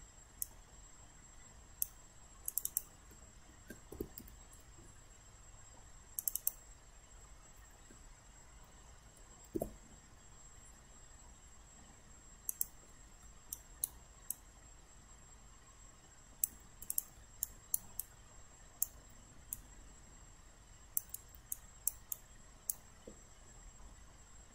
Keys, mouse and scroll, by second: 4.2 1, 6.2 click, 9.6 9, 12.5 click, 13.5 alt+right click, 14.3-16.5 alt+drag, 16.9 click, 17.4 alt+right click, 18.0 alt+click, 19.6-21.2 drag, 21.6 alt+click, 22.2 alt+right click.